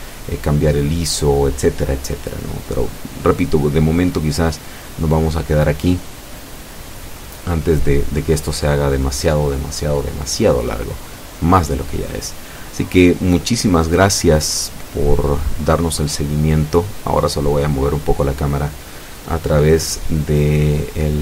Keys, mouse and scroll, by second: 7.4-9.0 drag, 9.2 scroll down 2, 9.4-13.1 middle drag, 13.2-13.6 scroll up 2, 14.0-15.8 middle drag, 16.0-16.3 scroll down 2, 16.6-17.4 middle drag, 19.6 KP_0.